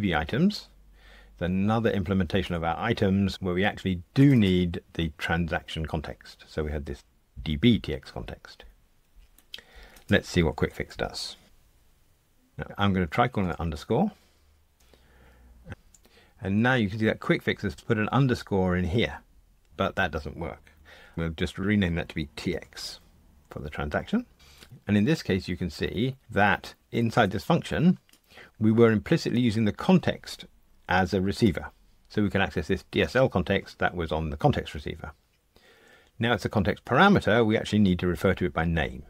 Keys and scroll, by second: 11.4 F1, 21.6 shift+F6.